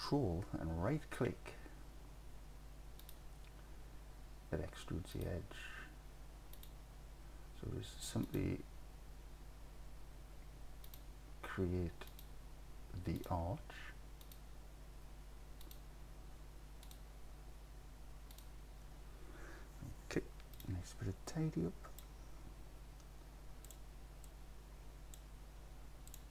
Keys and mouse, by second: 6.6 ctrl+click, 12.1 ctrl+click, 14.3 ctrl+click, 16.9 ctrl+click, 18.4 ctrl+click, 20.6 click, 21.4 click, 24.4 click, 26.1 click.